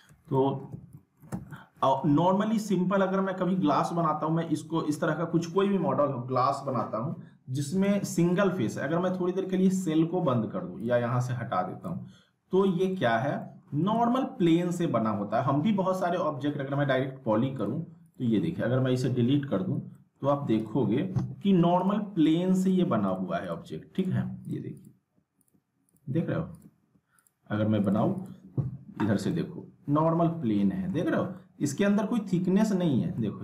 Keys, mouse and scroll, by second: 0.4 alt+middle click, 0.7 z, 0.9 alt+middle click, 1.3 z, 1.5-2.1 alt+middle drag, 7.9 alt+Num_Lock, 8.1 alt+middle click, 9.7 click, 12.4 scroll up 1, 12.7-13.3 alt+middle click, 13.8 right click, 15.9 click, 19.9 alt+middle click, 20.6 click, 29.3-31.2 alt+middle drag, 33.0 scroll up 1, 33.1-33.4 alt+middle click.